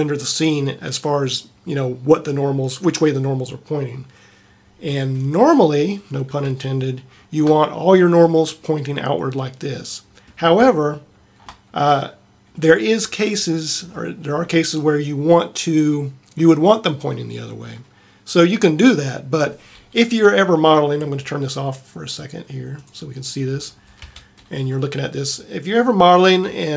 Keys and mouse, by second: 6.0 middle click, 7.2 middle click, 10.2-11.2 middle drag, 11.5-13.5 middle drag, 23.8 click, 24.1 Tab.